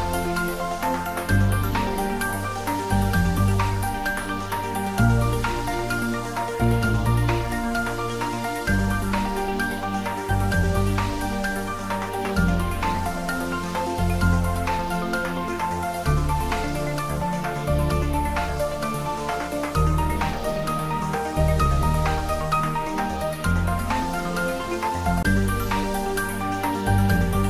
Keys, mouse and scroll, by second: 0.3 click, 2.5 scroll down 1, 4.7 click, 5.9-6.4 scroll up 1, 8.4-12.7 drag, 22.7-24.9 drag, 24.9-25.3 scroll up 1.